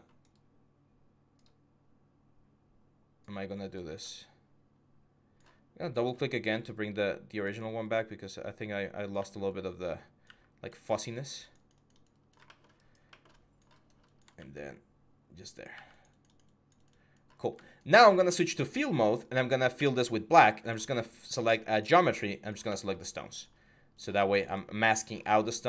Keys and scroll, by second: 8.9 x, 14.1 x, 17.9 4, 19.5 x.